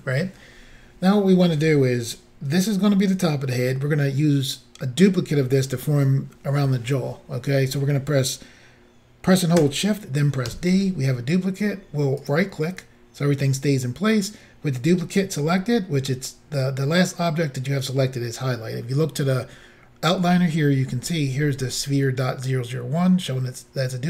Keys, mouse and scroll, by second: 10.5 d, 12.3 right click.